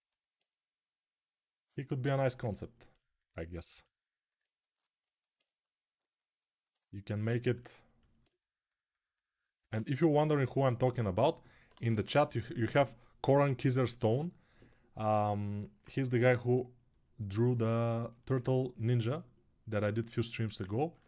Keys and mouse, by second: 17.4-20.6 alt+shift+drag, 20.6-21.0 ctrl+alt+right drag.